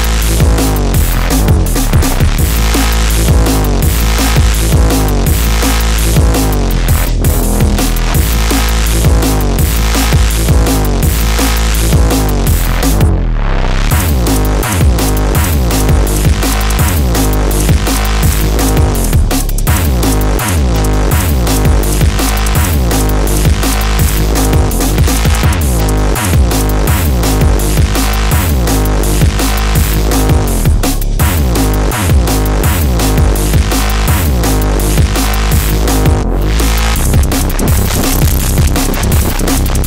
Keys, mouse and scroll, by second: 5.4-7.4 drag, 9.2 click.